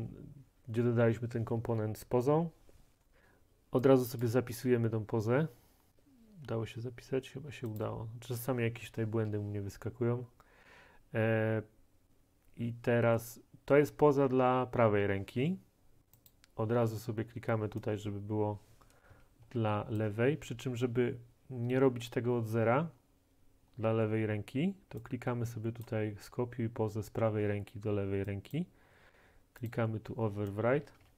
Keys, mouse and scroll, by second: 4.3 click, 6.5-7.1 scroll, 7.8 click, 9.0 scroll, 16.3 click, 19.2-19.5 typing, 20.0 right click, 25.9 click, 28.6 click, 30.9-31.1 typing.